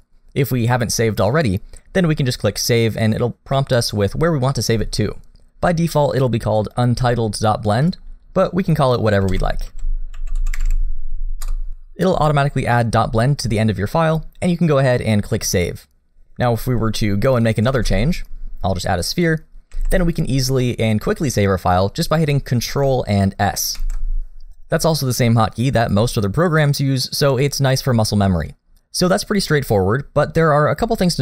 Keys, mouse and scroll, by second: 17.4 click, 17.7 shift+a, 19.7 g, 20.6 middle click, 23.8 ctrl+s.